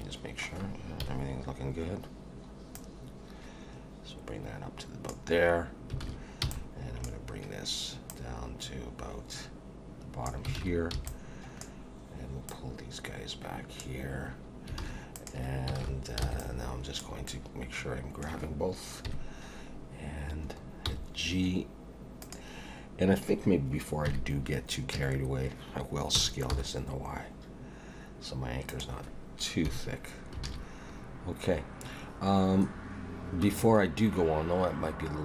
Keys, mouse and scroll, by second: 1.0 KP_1, 2.7 click, 6.0 alt+a, 6.4 b, 8.1 click, 10.6 alt+a, 10.9 b, 12.5 click, 14.8 alt+a, 15.1 click, 15.8 alt+a, 16.2 b, 17.3 middle click, 19.1 KP_1, 20.5 scroll up 1, 20.9 g, 24.1 KP_3, 24.9 a, 26.1 s, 29.7 KP_1, 30.5 alt+a, 31.0-31.5 scroll up 1, 31.5 scroll down 1.